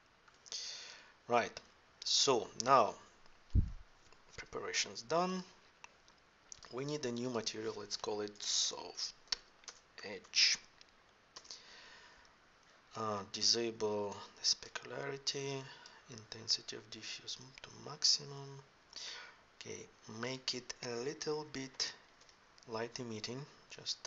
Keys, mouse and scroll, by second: 17.0 click, 17.3-19.0 drag, 20.1-22.0 drag, 23.6-24.0 drag.